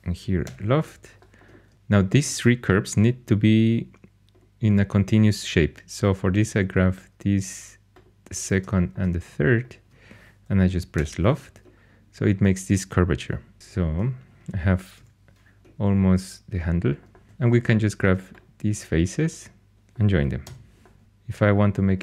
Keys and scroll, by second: 0.4 l, 10.9 l, 14.9 /, 17.2 4, 20.4 j.